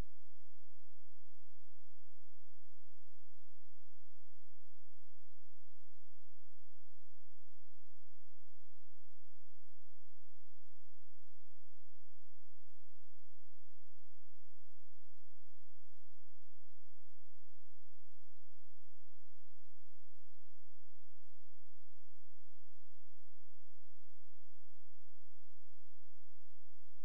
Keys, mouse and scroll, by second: 16.8 scroll down 1, 17.3-18.7 scroll up 1, 18.7 click, 21.1-21.7 scroll down 1, 21.7 click.